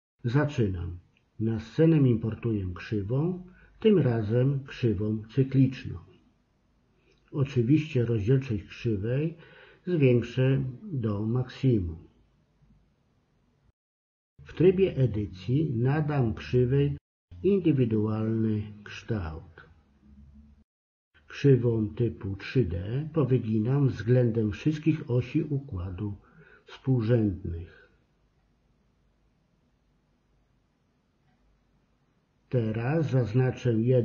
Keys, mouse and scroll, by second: 1.0 s, 3.4 shift+c, 8.6-11.4 drag, 12.8 Tab, 13.5 click, 13.8 KP_3, 14.2 g, 15.1 click, 15.5 g, 16.1 ctrl+z, 16.4 click, 17.1 g, 17.7 KP_7, 19.0 r, 19.8 ctrl+z, 20.4 g, 21.3 ctrl+z, 21.9 g, 23.6 click, 24.2 g, 25.4 middle click, 26.4 g, 27.0 KP_0, 27.5 Tab, 27.7 middle click, 28.1 KP_7, 28.4 Tab, 31.0 Tab.